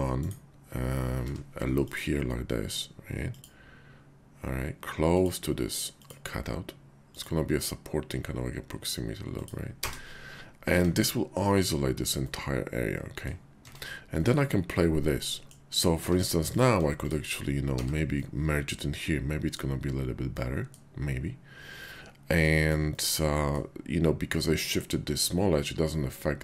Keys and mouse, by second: 0.2 click, 1.2 k, 10.7 Tab, 12.2 middle click, 13.6 Tab, 14.1 middle click, 15.4 ctrl+z, 15.4 click, 15.9 Tab, 17.6 1, 18.2-19.5 drag, 20.3 click, 22.5 shift+click, 22.9 middle click.